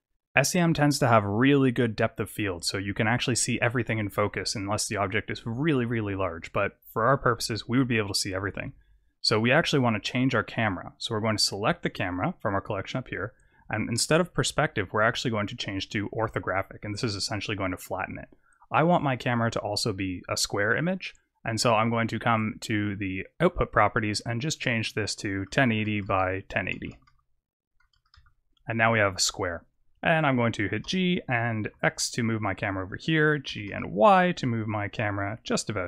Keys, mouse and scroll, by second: 9.6 click, 14.7 click, 18.1-20.4 scroll down 2, 20.6 click, 23.8 click, 25.0 click, 26.9 BackSpace, 27.6 BackSpace, 29.1-30.0 scroll down 3, 30.8 g, 33.4 g.